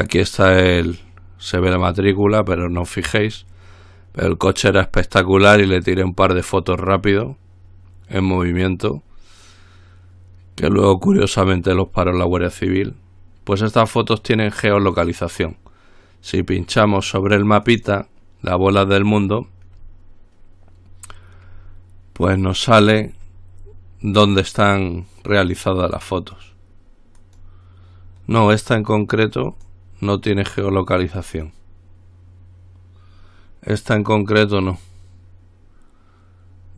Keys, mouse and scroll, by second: 17.9 click, 22.6 click, 23.7-24.2 scroll up 1, 24.2-24.9 scroll down 1, 27.4 click, 29.7 click, 31.4 click.